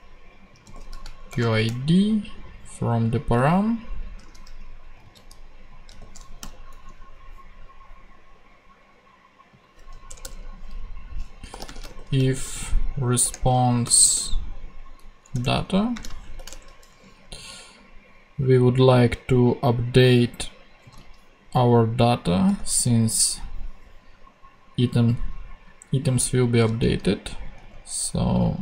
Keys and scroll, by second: 1.0 shift+super+v, 1.3 shift+super+;, 4.2 super+z, 5.0 super+c, 5.9 super+v, 6.4 super+,, 10.1 Return, 11.3-14.6 typing, 13.2 Return, 15.3 Return, 15.6 Right, 15.9 space, 16.2 shift+[, 16.5 shift+Return, 17.5 Return, 20.8 super+c, 26.7 super+c, 27.6 super+v.